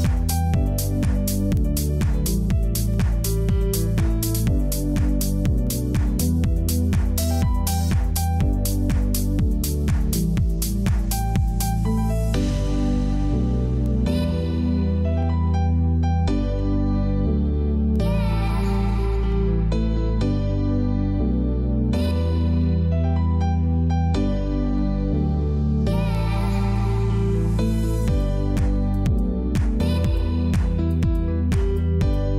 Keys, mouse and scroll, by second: 1.3 ctrl+e, 2.3 click, 7.8 ctrl+j, 8.3 ctrl+shift+a, 12.7 click, 13.2 space, 13.3 click, 13.7 space, 15.5 click, 20.4 click, 24.3 click, 28.3 click, 32.0 click.